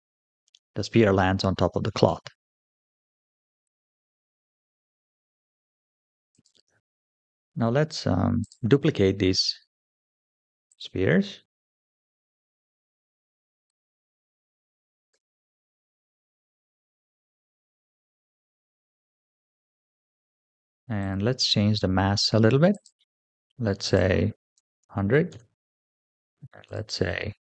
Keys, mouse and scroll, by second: 1.5 space, 1.9-2.5 middle drag, 3.4 click, 3.8-4.2 scroll down 4, 4.5 shift+middle drag, 6.2 click, 6.9-7.4 shift+middle drag, 7.6-8.3 scroll down 1, 8.3 click, 10.5 click, 11.8 shift+d, 14.1 click, 15.0 shift+d, 16.8 KP_7, 17.4-18.0 scroll down 1, 18.3 g, 20.8 click, 22.6 click, 23.7-25.2 drag, 24.8 KP_0, 26.5 click.